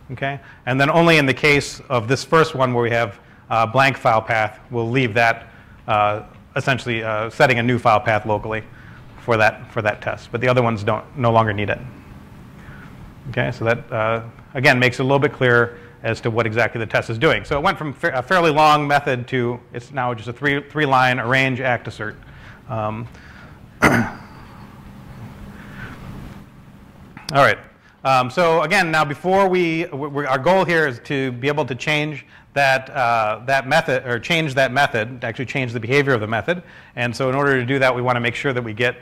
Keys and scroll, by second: 9.4-10.8 typing, 11.9-12.3 typing, 32.8-36.2 typing, 36.0 super+v.